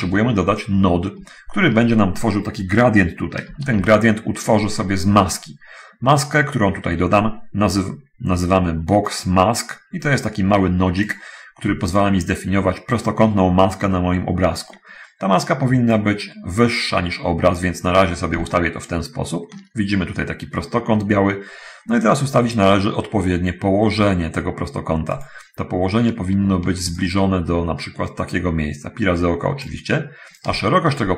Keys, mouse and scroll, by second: 0.1 middle click, 0.9 middle click, 3.9 shift+a, 11.1 middle click, 16.2-18.0 middle drag, 25.4 middle click, 27.3-30.1 shift+drag, 30.3-31.1 shift+drag.